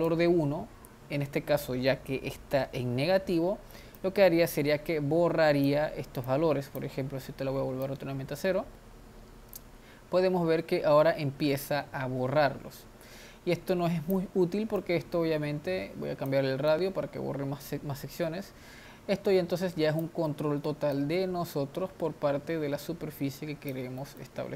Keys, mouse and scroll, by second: 4.3-11.0 drag, 14.9-20.4 drag, 20.4 middle click, 21.3-24.1 drag, 24.1 middle click.